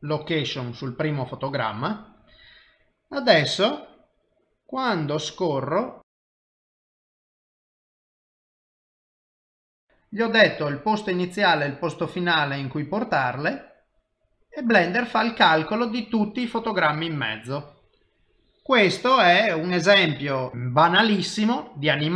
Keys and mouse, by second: 4.4 click.